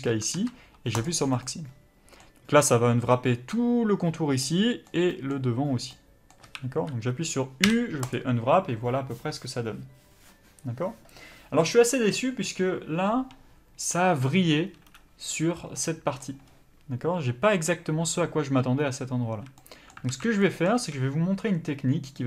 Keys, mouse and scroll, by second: 1.0 ctrl+e, 1.4 middle click, 6.4 a, 8.1 u, 19.3 a, 19.6 middle click, 20.1 alt+a, 20.4 middle click, 20.8 a.